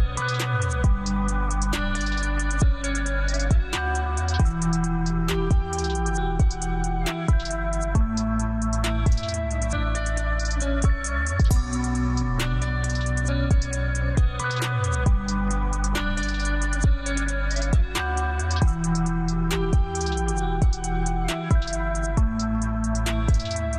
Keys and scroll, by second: 0.1 1, 0.6 Return, 4.4 space, 4.9 Escape, 7.0 alt+c, 7.2 alt+w, 7.7 p, 9.5 alt+c, 9.6 alt+w, 10.2 p, 12.3 Escape, 17.5 shift+F2, 17.8 shift+Page_Up, 18.3 F3, 20.0 F4.